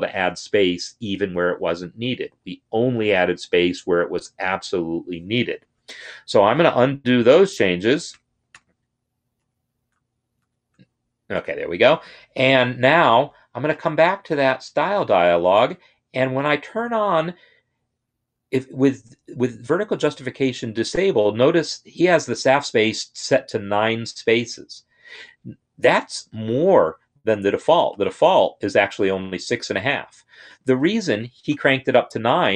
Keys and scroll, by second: 5.8 ctrl+z, 6.3 ctrl+z, 6.8 ctrl+z, 7.2 ctrl+z, 7.8 ctrl+z, 8.2 ctrl+z, 9.1 ctrl+z, 10.1 ctrl+shift+z, 30.5 ctrl+a, 31.3 9.